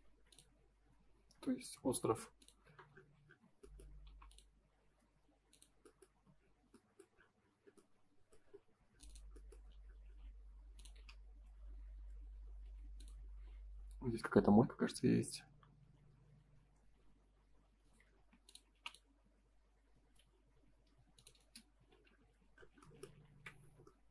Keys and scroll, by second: 3.2 space, 4.0 p, 5.9 space, 6.2 Escape, 18.1 space, 18.7 p, 20.1 F3, 21.3 space, 21.7 F4, 22.2 Escape, 23.2 ctrl+s.